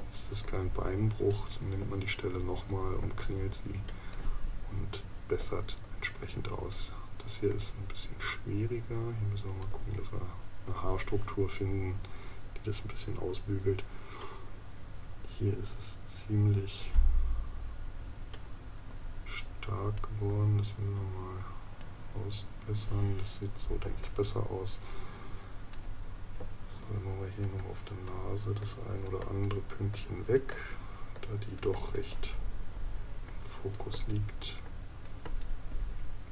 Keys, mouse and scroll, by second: 0.0 space, 3.0 space, 23.8 space.